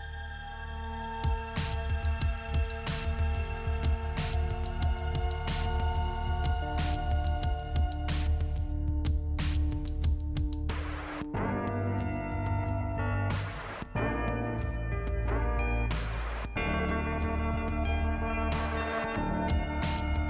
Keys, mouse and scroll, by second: 1.0-2.3 typing, 5.0 p, 6.8 middle click, 8.3 middle click, 9.2 middle click, 12.2 click, 12.4 click, 14.8 click, 16.7 click, 18.3 click, 19.7 click.